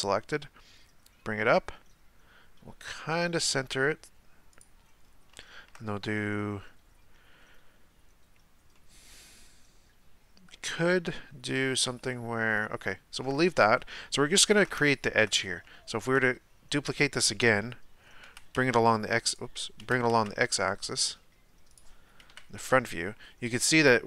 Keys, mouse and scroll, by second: 5.0-5.4 scroll down 2, 5.4-8.5 shift+middle drag, 8.7-11.8 middle drag, 12.1-16.0 shift+middle drag, 16.0 shift+d, 19.8 g, 22.3 KP_1.